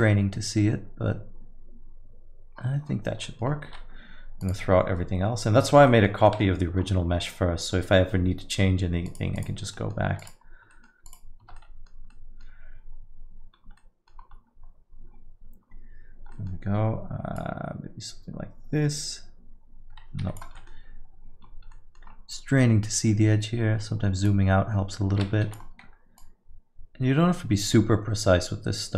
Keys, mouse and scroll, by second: 2.5-3.5 scroll down 14, 3.2 middle click, 3.7 x, 5.9 middle click, 6.3 middle click, 6.9 Tab, 9.0 click, 9.4 click, 9.7 middle click, 10.2 click, 10.7 middle click, 11.1 click, 12.0 Tab, 12.1 middle click, 13.6 scroll up 4, 13.8 middle click, 14.1-14.6 scroll down 2, 15.1 scroll down 3, 15.6 scroll down 1, 16.3 middle click, 17.4 click, 20.5 middle click, 21.4-21.7 scroll up 3, 21.7 middle click, 22.0 scroll down 3, 22.9-23.6 scroll down 5, 23.6-24.2 scroll up 1, 24.2 click, 26.2 click.